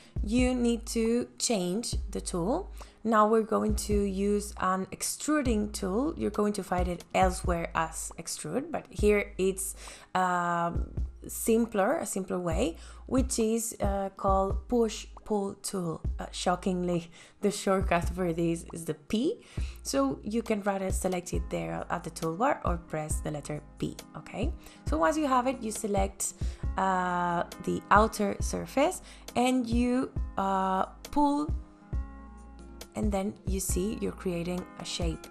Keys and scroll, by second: 22.6 p.